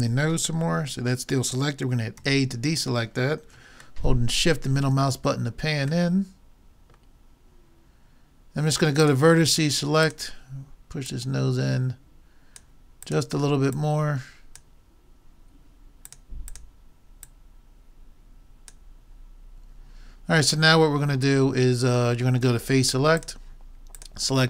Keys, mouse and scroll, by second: 2.2 a, 8.5 middle click, 9.1-12.8 drag, 13.1-15.6 drag, 16.1-19.0 drag, 23.2-24.4 drag.